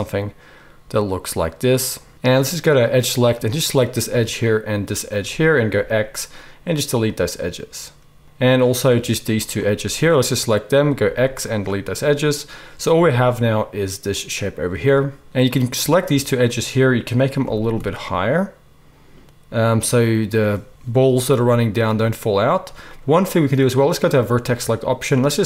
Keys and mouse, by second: 2.8 middle click, 3.6-4.9 right drag, 4.9 shift+middle click, 5.0-16.4 shift+right drag, 5.7 x, 11.0 x, 12.9 a, 16.4 shift+middle click, 16.5-25.4 shift+right drag, 17.4 g, 24.0-25.4 drag, 24.0-25.4 middle drag.